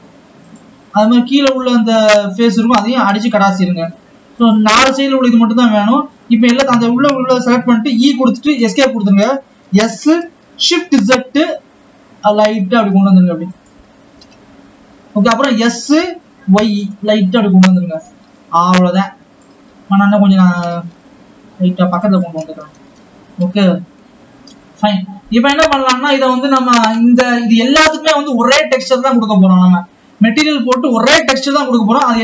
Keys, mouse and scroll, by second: 0.2 click, 0.7 click, 1.7 click, 2.7 x, 5.2-7.1 drag, 7.1 a, 14.4 KP_7, 16.2 s, 18.5 alt+a, 18.8 click, 20.5 a.